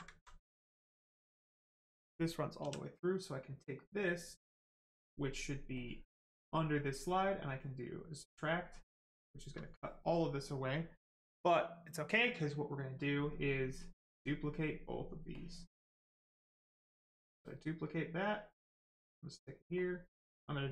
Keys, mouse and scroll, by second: 0.2 alt+right click, 0.8 right click, 0.9 right click, 2.6 w, 5.7 click, 13.6 click, 16.6 click.